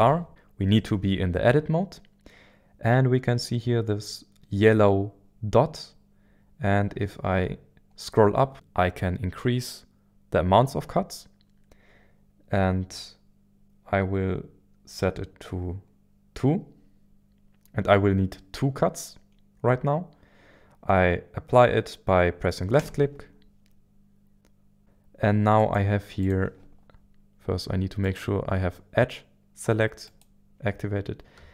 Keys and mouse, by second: 25.6 click, 26.2 click, 28.0 click, 30.0 click.